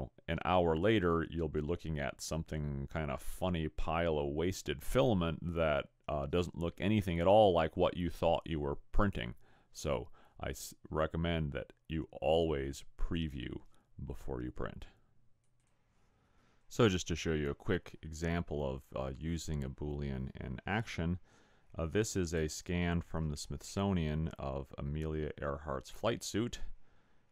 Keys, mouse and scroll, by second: 0.5 middle click, 1.7 middle click, 4.0 scroll down 4.